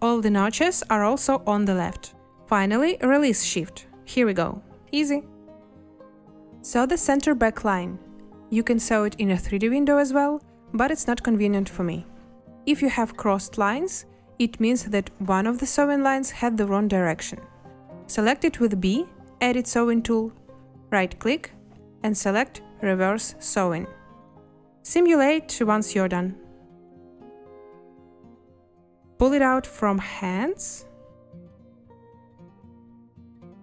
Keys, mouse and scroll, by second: 19.2 b, 26.7 space.